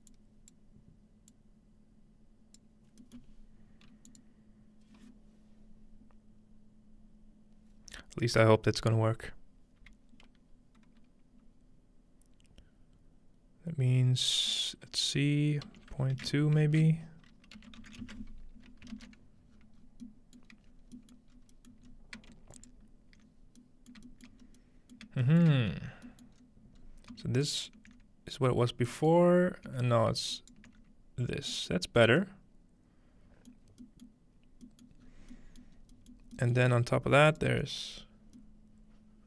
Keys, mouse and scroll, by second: 3.5-5.5 middle drag, 19.5-21.2 ctrl+scroll down 2, 21.2-21.9 ctrl+scroll down 1, 21.9-23.0 scroll down 1, 23.0-25.0 alt+shift+drag, 23.0-23.8 scroll up 1, 23.8-25.0 scroll up 1, 25.0 shift+middle click, 25.0-26.1 scroll up 1, 25.5-29.0 shift+middle drag, 26.1-27.2 scroll down 1, 29.0-29.4 scroll down 1, 29.2-31.0 ctrl+alt+middle drag, 29.4 scroll up 1, 33.6 middle click, 34.1 middle click, 34.4 scroll down 2, 34.9-35.3 middle drag, 35.0 scroll down 2, 37.0-39.0 alt+shift+middle drag, 37.3-39.0 alt+shift+drag.